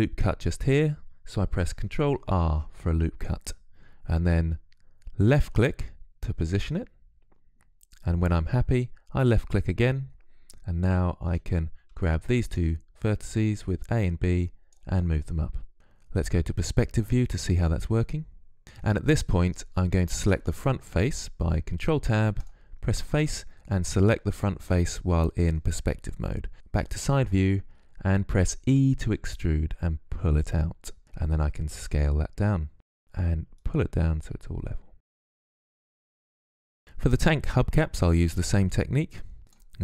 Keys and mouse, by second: 1.7 ctrl+r, 10.5 a, 11.2 b, 12.6-14.6 drag, 15.7 z, 16.3 click, 19.9 ctrl+Tab, 23.0-26.5 drag, 26.5 KP_3, 28.5 e, 31.5 s, 33.3-34.9 drag, 35.8 click, 35.9 middle click, 36.4 Tab, 37.8 click, 38.4 shift+a, 39.6 s.